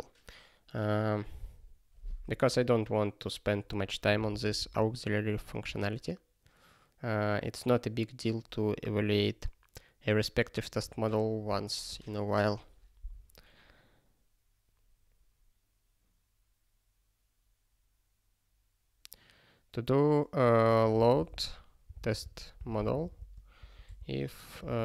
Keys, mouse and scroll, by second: 2.8 click, 4.1 ctrl+g, 4.6 ctrl+e, 20.6-24.8 typing.